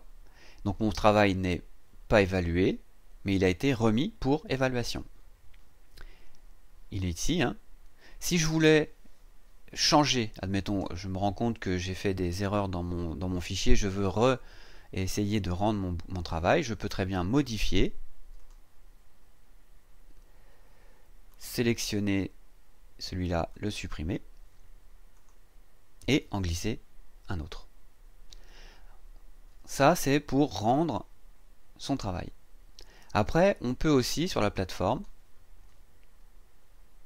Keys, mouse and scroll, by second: 0.7-1.1 scroll up 2, 1.4-1.7 scroll up 2, 4.7-5.8 scroll down 6, 18.4 click, 21.3 click, 23.5 click, 25.1 click, 30.6 click, 34.9 click.